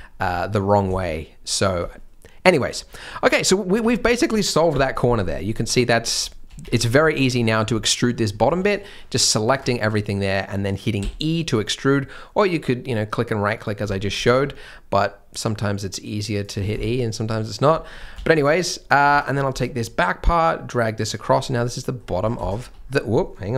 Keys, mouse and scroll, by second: 1.0 shift+m, 3.1 middle click, 3.8 Tab, 4.1 shift+m, 5.5 scroll down 1, 6.6 Tab, 6.8 scroll up 1, 7.0 shift+m, 8.3 scroll up 1, 8.4 c, 10.9 e, 13.9 shift+m, 14.2 g, 16.5 scroll down 1, 16.8 shift+m, 17.7 scroll up 1, 18.2 alt+a, 18.3 c, 19.5 g, 21.3 scroll down 1, 21.5 middle click, 22.1 scroll down 1, 22.3 shift+scroll, 22.5 shift+middle click, 22.8 scroll up 1.